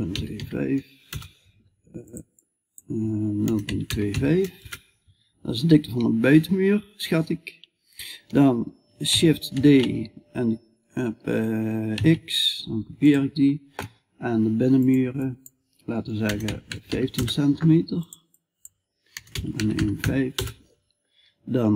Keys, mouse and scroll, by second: 9.0 shift+d.